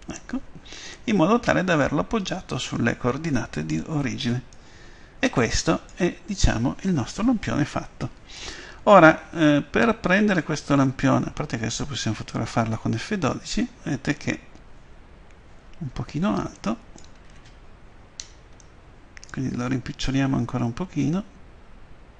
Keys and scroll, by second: 12.4 F12, 15.5 Escape, 21.1 s.